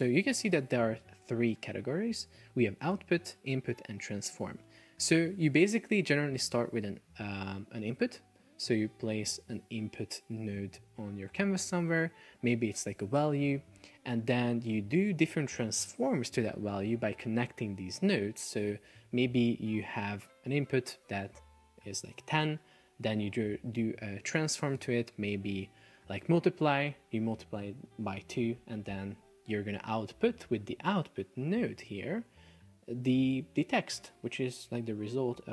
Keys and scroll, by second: 12.9 shift+super+4, 13.5 Escape.